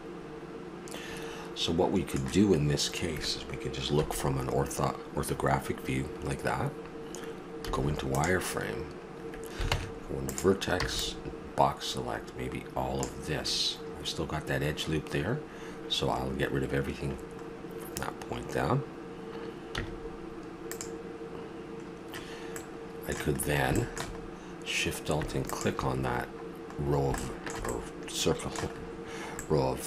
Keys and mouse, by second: 4.0 KP_1, 7.6 z, 9.7 ctrl+Tab, 10.8 b, 13.4-15.3 middle drag, 17.1-19.1 middle drag, 19.8 x, 22.6 middle click, 25.4 right click, 26.0-27.4 middle drag, 27.7 middle click, 28.4-29.8 middle drag.